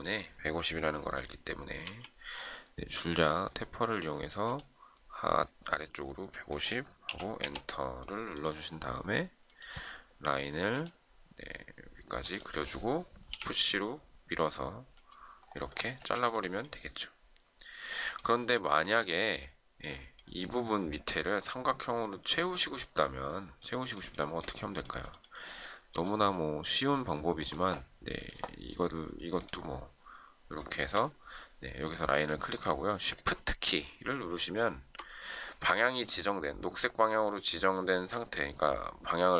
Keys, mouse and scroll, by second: 1.7 t, 6.0-7.0 typing, 8.0 Return, 13.2 p, 15.9 space, 24.1 shift+middle click.